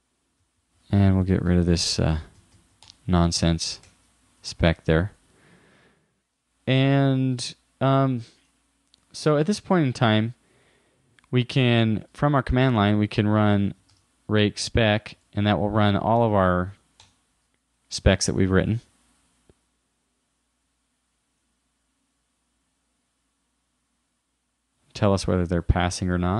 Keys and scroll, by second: 1.7 super+Left, 2.0 shift+Down, 3.9 super+Right, 4.4 super+s, 12.2 super+Tab.